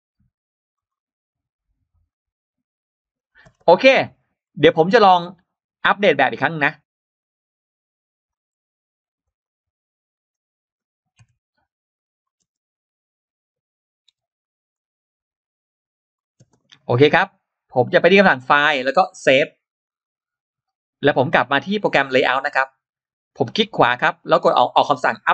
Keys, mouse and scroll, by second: 0.6 click, 1.9 click, 3.0 click, 3.3-4.2 scroll down 2, 4.6 scroll up 1, 8.1 click, 9.1 click, 9.2 click, 10.0 click, 11.3 click, 12.1 click, 12.1 m, 12.7 click, 12.7 space, 14.5 click, 14.5 m, 14.5 space, 16.0 click, 16.4-18.0 drag, 19.3 click, 22.0 click.